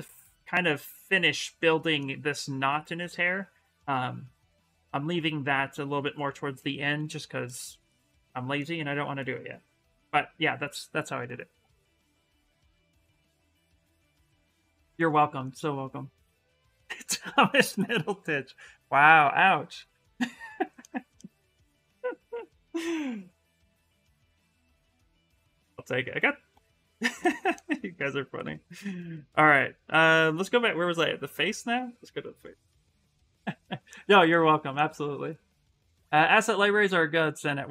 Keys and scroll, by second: 11.8 s, 22.8-24.6 typing, 37.3 s.